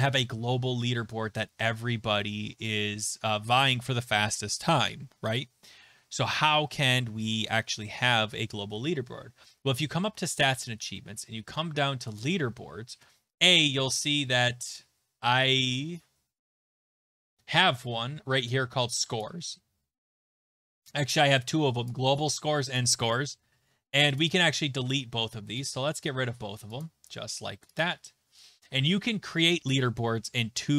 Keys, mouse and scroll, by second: 12.7 click, 19.2 click, 21.8 click, 22.8 click, 24.2 click, 25.7 click, 26.8 click, 27.8 click.